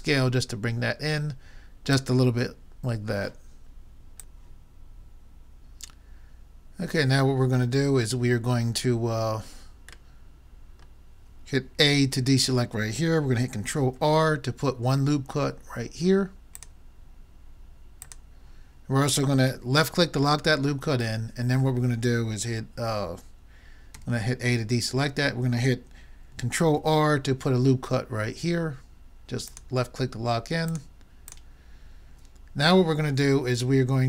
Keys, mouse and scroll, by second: 10.1 middle click, 12.2 a, 13.8 ctrl+r, 17.7 middle click, 18.2 middle click, 20.1-22.6 middle drag, 24.0 a, 26.8 ctrl+r, 31.4-33.1 drag, 32.9 middle click, 33.1-34.0 middle drag.